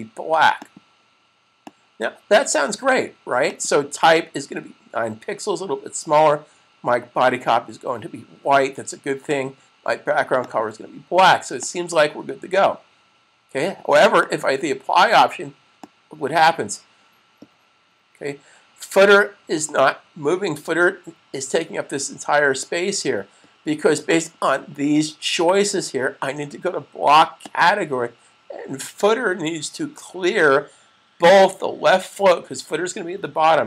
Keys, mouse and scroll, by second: 9.1 click, 13.8 click, 24.1 click, 27.2 click.